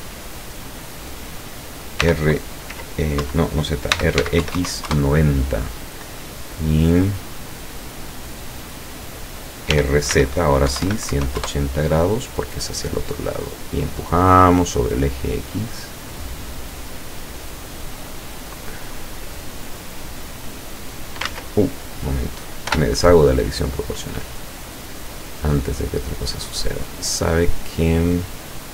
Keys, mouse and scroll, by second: 2.1 r, 2.7 z, 3.2 Escape, 4.0 r, 4.2 x, 4.5 KP_9, 4.6 KP_0, 4.9 KP_Enter, 6.7-8.8 drag, 9.8-11.2 typing, 11.4 KP_Enter, 13.8-17.5 drag, 18.6-21.3 drag, 21.3 ctrl+z, 22.7 o, 24.0-25.8 drag, 25.9-26.4 middle drag, 27.4-28.2 middle drag.